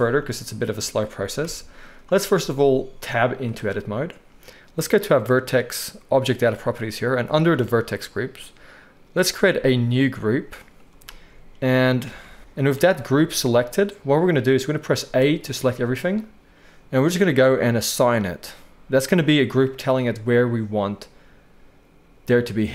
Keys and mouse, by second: 1.4 KP_1, 3.6 Tab, 6.6-9.7 middle drag, 9.7-13.3 drag, 12.1 alt+a, 13.3-17.6 middle drag, 15.3 a, 17.6-22.7 drag.